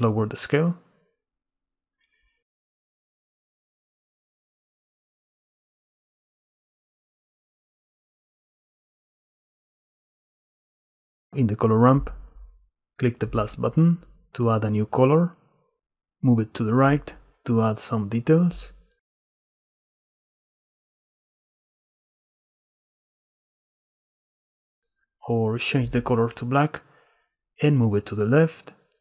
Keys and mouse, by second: 0.0-1.8 shift+middle drag, 3.3 shift+middle click, 3.8-6.0 shift+drag, 7.5 click, 12.7 click, 14.4 drag, 16.0-17.4 drag, 17.9 click, 18.0 click, 19.5 click, 20.3 click, 20.5 middle click, 20.5 click, 20.9 middle click, 21.4-21.7 drag, 21.7 middle click, 21.8 click, 23.5-25.2 drag, 25.6 click.